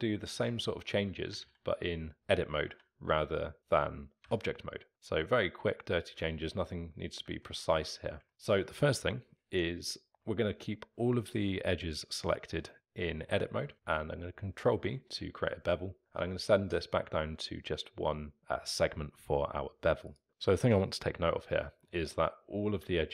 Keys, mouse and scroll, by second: 0.3-1.3 alt+middle drag, 1.3 s, 2.7 s, 6.3-6.7 alt+middle drag, 6.7-7.5 scroll down 1, 7.5-8.3 alt+middle drag, 8.3 Tab, 10.1 Tab, 10.1-12.7 scroll up 3, 12.7-14.7 middle drag, 14.7 ctrl+b, 20.3-21.6 scroll up 1, 21.6 alt+middle drag, 21.9-23.0 scroll up 1, 23.0-23.1 alt+middle drag.